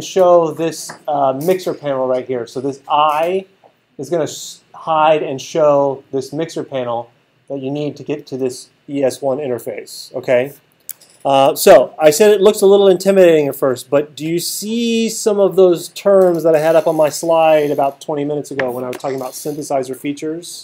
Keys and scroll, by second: 11.5 alt+super+8.